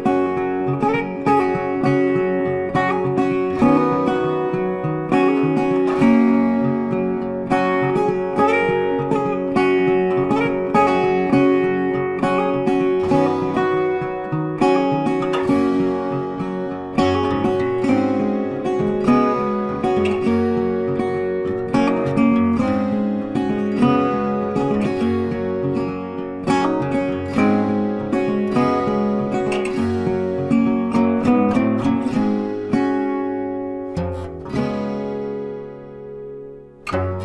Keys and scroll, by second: 0.8 ctrl+t, 21.3 ctrl+t.